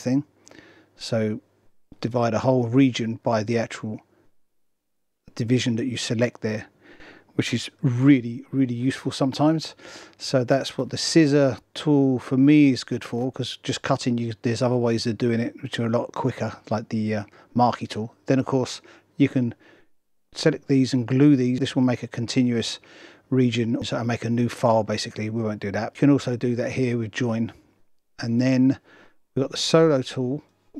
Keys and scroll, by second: 8.0 super+z.